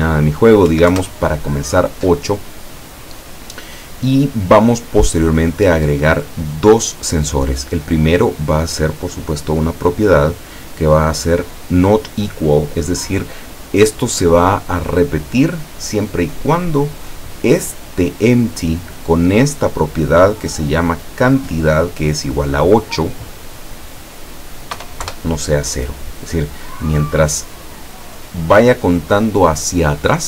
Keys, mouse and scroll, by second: 0.7 KP_8, 0.9 KP_Enter, 5.7 click, 9.6 click, 10.9 click, 12.4 click, 13.6-14.5 middle drag, 20.0 click, 20.9 click, 23.9 click, 24.8 KP_0, 25.1 KP_Enter.